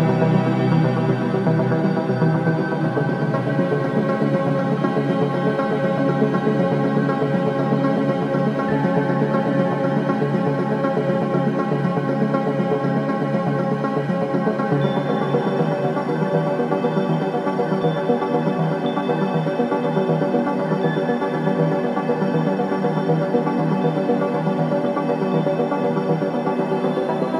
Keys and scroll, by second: 0.9-6.1 typing, 7.6-9.6 typing, 11.7 ctrl+t, 16.5 n, 17.0 BackSpace, 17.3 BackSpace.